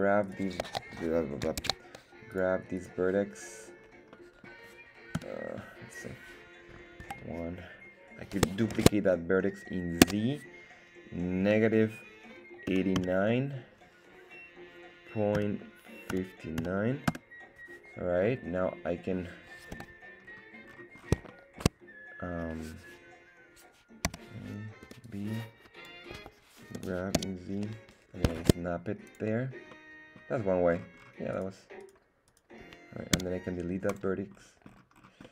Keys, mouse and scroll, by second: 0.6 right click, 1.7 ctrl+Tab, 3.3 right click, 3.3 scroll down 2, 4.0-4.5 scroll down 2, 4.5 middle click, 5.4 /, 7.1 KP_1, 7.7-8.2 scroll down 1, 8.7 shift+d, 10.0 z, 11.4 KP_Subtract, 12.7 KP_8, 12.9 KP_9, 15.3 ., 16.1 KP_5, 16.6 KP_9, 17.1 Return, 18.2 middle click, 20.1 KP_1, 20.2-20.9 scroll down 2, 20.6-21.3 scroll up 3, 21.3 shift+middle click, 24.0 a, 24.8 b, 26.1 Escape, 26.7 g, 27.1 z, 28.4 shift+Tab, 29.1 click, 29.7 middle click, 30.4 scroll down 2, 30.7-31.3 scroll up 4, 31.3 right click, 31.8 right click, 32.3 right click, 33.2 x, 34.3-34.7 scroll down 2, 34.9-35.2 scroll down 3, 35.2 middle click.